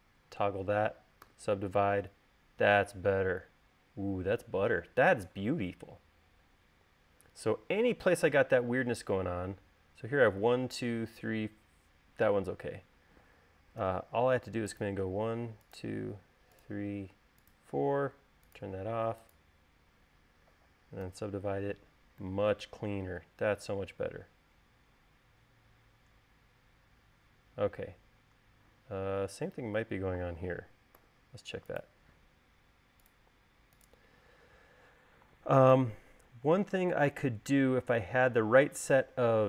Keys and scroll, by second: 1.6 u, 14.2 u, 21.4 u, 31.4 u, 36.3 u.